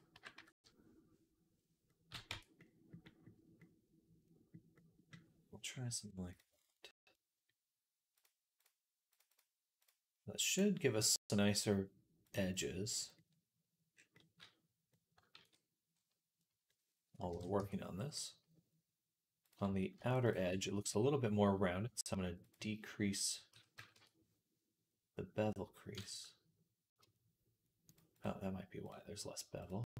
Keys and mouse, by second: 2.1 Tab, 2.5-4.1 drag, 8.0 middle click, 9.0 middle click, 9.2 middle click, 9.7 middle click, 10.4 middle click, 11.2 middle click, 12.1-15.2 middle drag, 15.2 ctrl+s, 15.2-19.8 drag, 17.1 KP_1, 17.4 Tab, 19.8 alt+shift+middle click, 20.1 alt+shift+click, 20.3-22.2 middle drag, 22.2-25.8 drag, 25.8-29.9 middle drag.